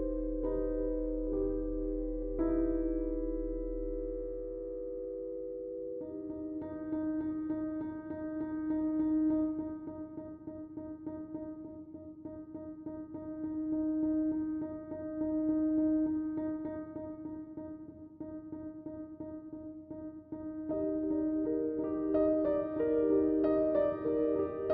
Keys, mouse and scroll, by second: 0.8 ctrl+click, 1.0 space, 1.9 click, 5.5 space, 5.6 click, 6.0 space, 6.3 click, 9.7 ctrl+click, 16.8 space, 16.9 click, 20.4 shift+click.